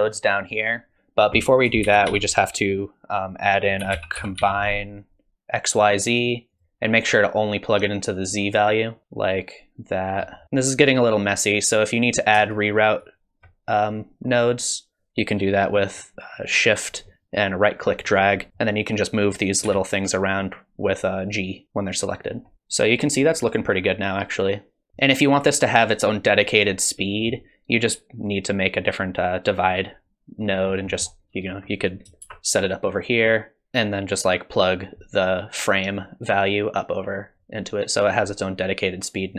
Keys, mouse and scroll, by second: 1.4 click, 1.8 shift+a, 8.2 click, 9.0 click, 12.5 shift+right click, 18.5 click, 19.6 g, 22.5 middle click, 22.5-23.7 scroll up 2, 22.5 space, 26.7 middle click, 30.6-31.1 scroll down 2, 30.9 middle click, 31.8 click, 32.2 shift+d, 33.6 click, 34.1 click.